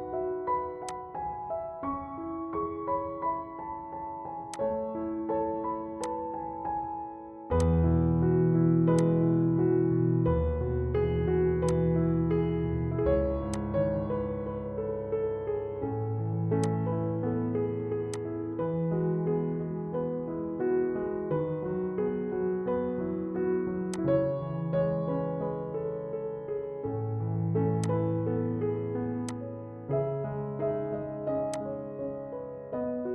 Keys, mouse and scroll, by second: 1.1-3.5 shift+drag, 3.5 F4, 4.6 click, 6.3 F4, 7.7 click, 9.3 click, 11.7 click, 16.8-22.3 drag, 24.0 click, 25.0 right click, 27.9 click, 31.6 click.